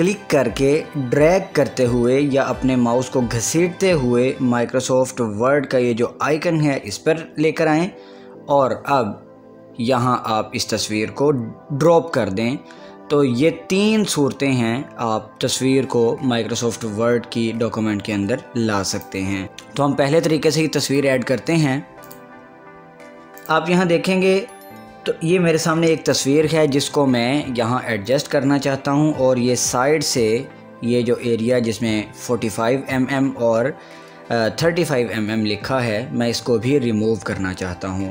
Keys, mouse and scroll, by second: 13.2 scroll up 1, 13.3 scroll down 1, 13.4 scroll up 1, 13.8-14.2 scroll down 2, 14.7 scroll down 1, 14.8 scroll, 14.9 scroll up 1, 19.2 click, 22.9 click, 27.6 scroll down 1, 28.1 scroll up 1, 32.7 scroll down 1.